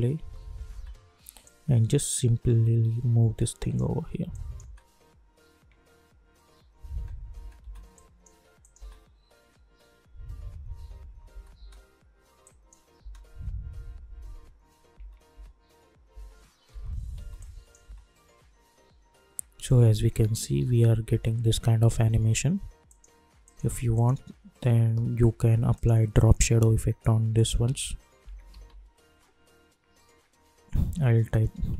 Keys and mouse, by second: 1.4-4.3 drag, 4.6 space, 6.8 space, 7.9 click, 8.7 space, 10.9 space, 12.4 click, 13.0 space, 14.9 space, 17.4 click, 17.8 space, 21.0 space, 22.8 click, 27.6 ctrl+a, 27.9-29.0 typing, 31.4-31.7 typing.